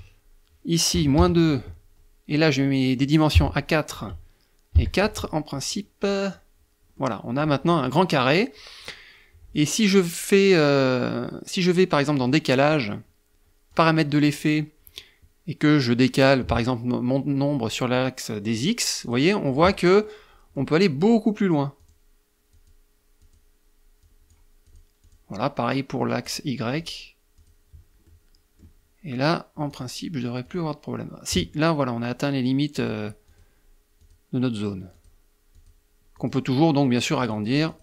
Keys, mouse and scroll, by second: 0.4 KP_Subtract, 0.6 KP_2, 1.0 Tab, 2.8 KP_4, 3.4 Tab, 4.2 KP_4, 4.4 Tab, 5.5 click, 6.4 middle click, 11.6 click, 13.1 click, 17.3 click, 17.9 click, 18.4 click, 18.9 click, 19.4 middle click, 21.2 click, 21.9 click, 22.6 click, 23.4 click, 24.0 click, 24.4 click, 25.6 click, 26.1 click, 26.8 click, 27.4 click, 29.0 click, 29.8 click, 32.1 click, 32.6 click, 33.3 click, 34.3 click, 34.8 click, 35.5 click, 36.5 click, 37.0 click.